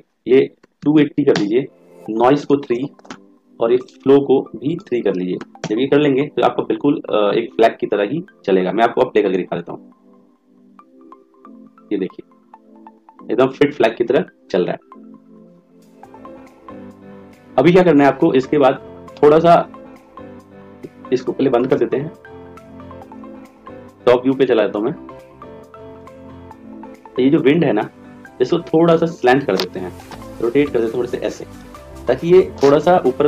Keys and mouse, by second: 2.3 click, 5.9 click, 9.3 click, 22.0-24.0 drag, 28.5 click, 30.1 r.